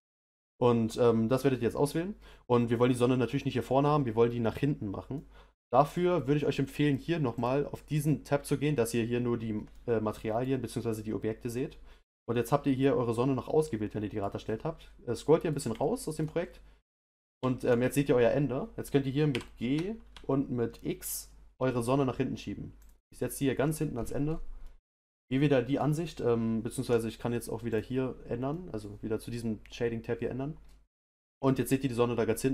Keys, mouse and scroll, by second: 5.1-7.3 middle drag, 7.3-8.5 drag, 9.7 middle click, 10.5-13.1 scroll down 4, 13.1-13.8 scroll down 1, 13.8 middle click, 14.4-15.2 scroll down 5, 15.2-16.3 middle drag, 16.3-16.7 scroll down 1, 16.7-19.3 middle drag, 19.3 g, 23.9-24.6 scroll up 6, 24.6-27.7 middle drag, 27.7 click, 28.5-30.6 middle drag, 30.6-31.7 scroll up 1.